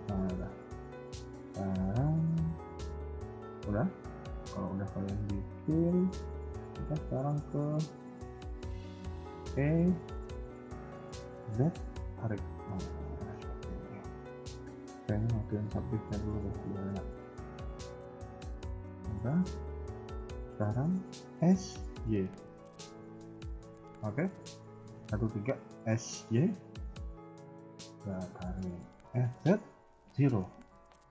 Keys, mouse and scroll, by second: 0.1 shift+middle click, 0.4-1.1 scroll up 1, 2.6 middle click, 3.7-4.9 typing, 5.5 scroll up 1, 9.4 e, 12.2 scroll down 4, 12.5 middle click, 13.3 KP_1, 13.5 KP_3, 14.8-15.3 scroll up 7, 15.7 click, 16.0 scroll up 2, 16.3 KP_1, 18.9 middle click, 19.3 KP_3, 21.2 s, 24.3 KP_1, 24.7 KP_3, 25.6 s, 28.0 KP_1, 28.2-28.7 scroll up 2, 29.0 s, 30.7 middle click.